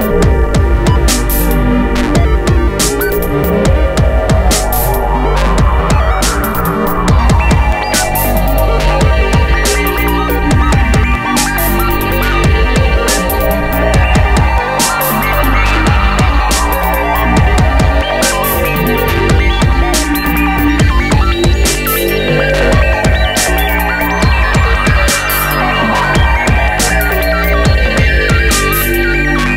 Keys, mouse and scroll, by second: 0.7 scroll up 1, 1.8 click, 2.3 click, 4.6 shift+click, 6.1 middle click, 6.5 middle click, 7.8 ctrl+z, 8.4 ctrl+click, 10.3 middle click, 10.3 scroll down 1, 10.9-11.7 scroll down 1, 13.2 middle click, 13.5 scroll up 1, 14.1-14.5 scroll up 1, 14.5 middle click, 15.0 scroll up 1, 17.1 scroll up 1, 17.6 middle click, 19.9 middle click, 20.4 middle click, 22.4 middle click, 22.7 middle click, 22.9 scroll down 1, 24.6 middle click, 25.1 middle click, 25.8 middle click, 26.8 middle click, 27.6 ctrl+click.